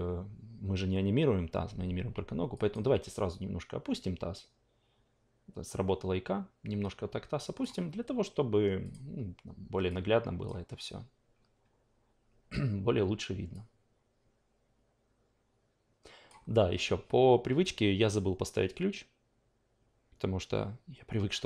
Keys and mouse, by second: 2.5 drag, 2.9 w, 3.9-8.3 drag, 8.8 click, 9.9 click, 13.5-16.3 drag.